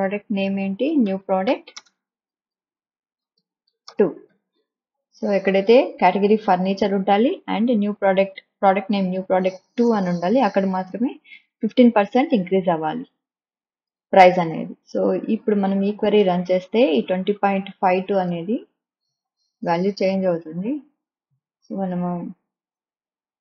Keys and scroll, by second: 0.6 ', 1.4 Left, 2.8 space, 4.8 t, 5.6 2.